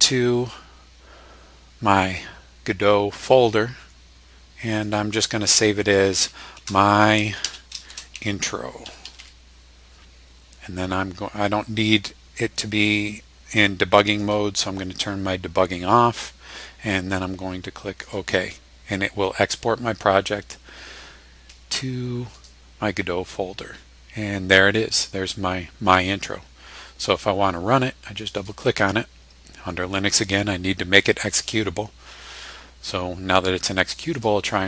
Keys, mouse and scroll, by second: 4.8 click, 6.5-9.7 typing, 14.2 click, 18.0 click, 22.3 click, 28.2 click, 31.4 click, 34.0 click.